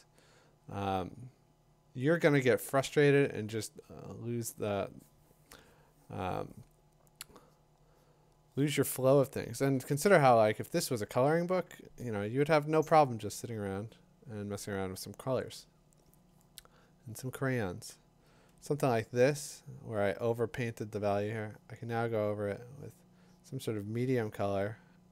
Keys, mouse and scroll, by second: 9.6 ], 9.9 ], 13.7 click, 19.4 click, 19.9 click.